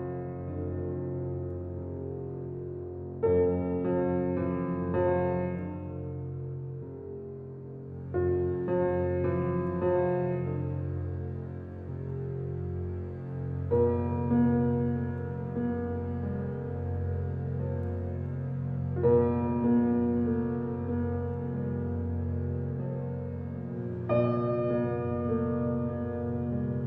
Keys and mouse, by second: 1.0-2.1 drag, 2.5-3.0 alt+drag, 3.1-3.6 drag, 3.8 click, 5.2 click, 7.0 click, 8.2 ctrl+alt+click, 8.7 alt+shift+click, 8.9 alt+shift+click, 9.1 ctrl+alt+click, 9.9 1, 10.7-12.4 alt+shift+drag, 12.6 s, 13.3 Escape, 14.9 f, 15.6 click, 16.5-17.7 drag, 20.3 ctrl+z, 22.7-24.5 drag, 24.5 ctrl+z.